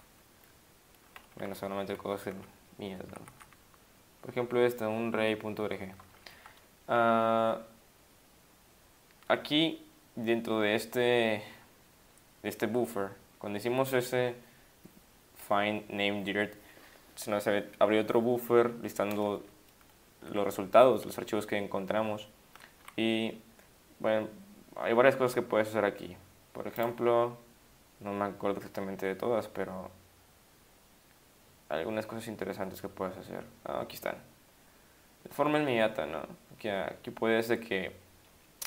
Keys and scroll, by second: 1.4 Down, 1.9-2.3 Down, 3.1 Up, 3.2 Up, 3.3 Up, 19.6 Up, 20.0-20.3 Up, 21.8 Down, 22.3 Down, 22.6 Down, 22.8 Down.